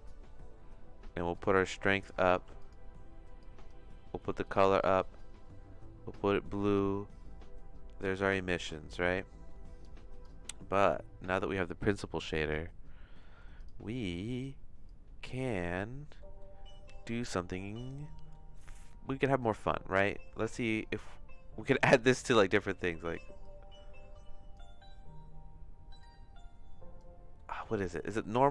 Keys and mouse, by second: 1.4 click, 2.3 ctrl+z, 2.6 click, 4.4 click, 6.7-8.0 drag, 8.9 middle click, 9.4 middle click, 9.8 click, 10.8 click, 13.2 middle click, 14.0 click, 14.8 click, 16.2 middle click, 17.7 middle click, 18.6 middle click, 19.1 middle click, 19.4 middle click, 20.2 middle click, 23.4-24.5 drag, 26.0-27.0 drag, 27.5 middle click, 28.2 middle click.